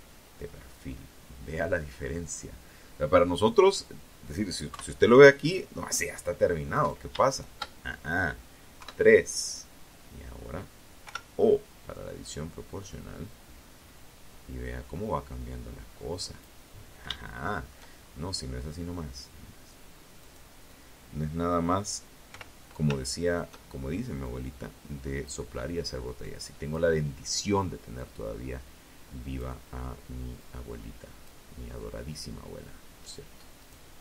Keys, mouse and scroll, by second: 2.8 KP_1, 4.9 right click, 5.4 shift+right click, 6.9 KP_3, 9.2 o, 10.4-14.8 drag, 15.3 shift+scroll up 1, 15.4 shift+middle click, 16.2-16.5 shift+scroll up 1, 18.4 right click, 20.4 o, 21.4 shift+right click, 22.4 click, 24.4 click, 25.7-27.7 drag, 28.6 click, 31.8 right click, 32.4 shift+right click, 33.5 click.